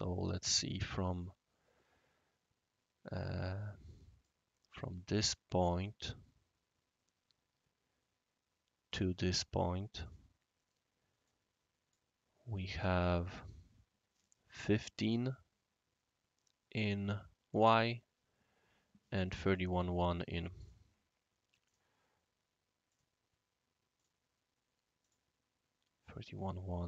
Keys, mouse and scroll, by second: 1.2-4.2 right drag, 5.6 click, 8.9 click, 10.0 click, 11.2-11.9 drag, 19.4 click, 19.4 space, 20.6 click, 21.6 click, 22.9 click, 23.9 click, 25.0 click.